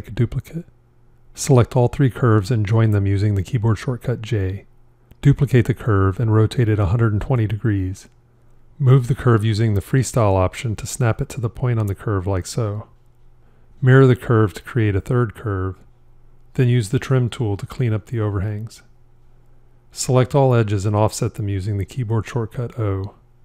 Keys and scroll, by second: 3.6 j, 5.5 shift+d, 14.3 alt+x, 20.6 o.